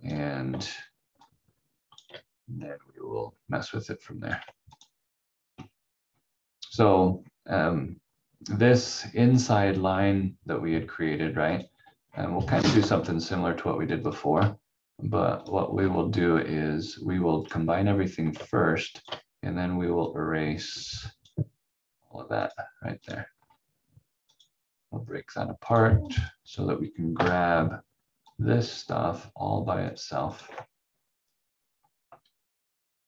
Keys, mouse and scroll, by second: 1.2 shift+click, 5.8-7.1 scroll down 1, 7.1 scroll up 1, 11.5 click, 12.0 scroll up 1, 13.9 shift+l, 15.7 scroll down 1, 17.4 click, 18.5 shift+click, 23.3 scroll down 1, 24.3 click, 27.1 Delete, 28.2 click.